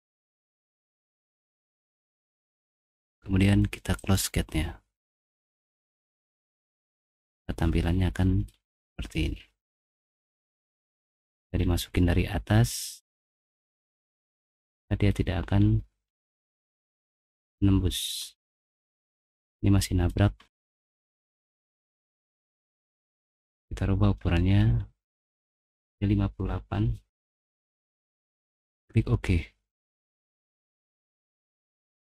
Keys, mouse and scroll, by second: 0.8-1.6 typing, 5.5-6.6 middle drag, 6.6 scroll up 1, 7.1 click, 7.1-8.4 middle drag, 8.5-9.8 scroll down 3, 9.8-11.0 middle drag, 11.2-11.9 scroll down 1, 11.8-14.9 middle drag, 15.0-16.5 middle drag, 16.6-18.2 middle drag, 18.2-18.8 scroll down 2, 19.0-19.5 scroll up 2, 19.5 middle click, 20.4 middle click, 21.0 middle click, 21.2 middle click, 21.3 scroll down 1, 21.5-22.7 middle drag, 22.8 click, 23.0 click, 23.1 scroll down 1, 23.3 middle click, 23.5 middle click, 24.2 middle click, 24.6 middle click, 25.3 click, 26.8-27.8 typing, 28.9 click, 30.9 click.